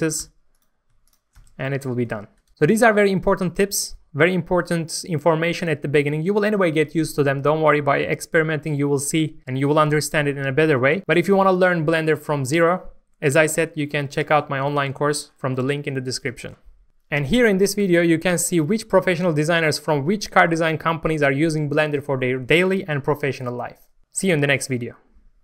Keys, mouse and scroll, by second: 0.2 f, 0.5 click, 1.0 shift+click, 1.4 f, 1.8 Tab, 1.9 scroll down 1, 2.5 middle click, 2.6 scroll up 1, 2.9 shift+middle click, 8.7-9.1 scroll up 1, 9.2 middle click.